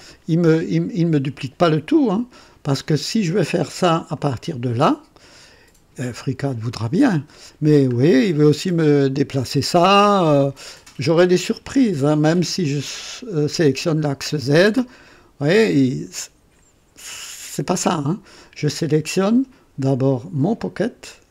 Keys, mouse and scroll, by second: 0.0 typing, 2.7 click, 4.1 click, 6.6 click, 7.9 scroll down 1, 12.6 click, 13.4 click, 14.9-16.8 drag, 17.6 click, 20.5 click.